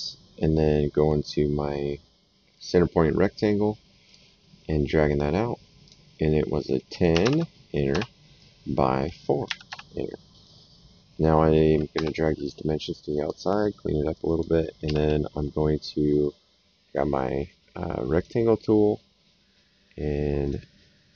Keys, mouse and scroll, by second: 2.5 click, 4.0 click, 5.8 click, 7.1 KP_1, 7.2 KP_0, 7.9 Return, 9.4 KP_4, 9.6 Return, 11.9 Escape, 12.4 click, 14.1 click, 14.8 s, 18.1 click, 20.4 click.